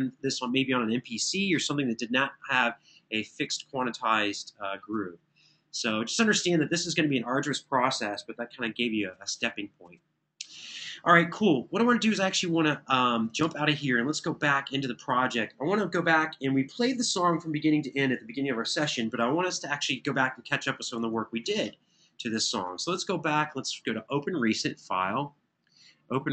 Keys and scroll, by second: 13.2 super+s, 21.1 super+w.